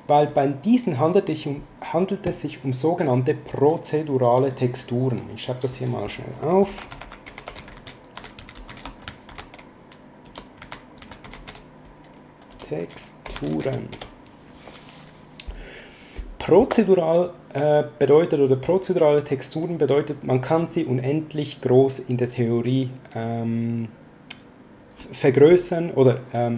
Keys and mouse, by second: 2.9 click, 4.4 click, 5.7 click, 6.3-14.0 typing, 19.6 click.